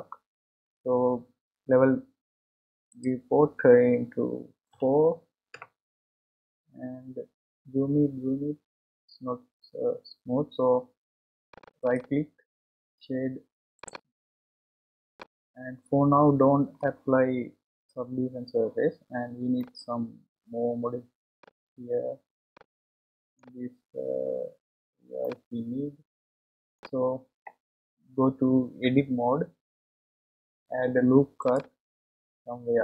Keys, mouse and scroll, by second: 2.9-6.0 drag, 7.1-8.9 scroll up 8, 8.9-9.4 scroll down 3, 10.3-11.5 scroll down 5, 11.5 click, 11.9-14.9 right drag, 15.2-18.2 middle drag, 19.6-21.5 middle drag, 21.5-22.6 scroll up 1, 22.6-28.4 middle drag, 29.0 Tab, 31.4-32.8 drag.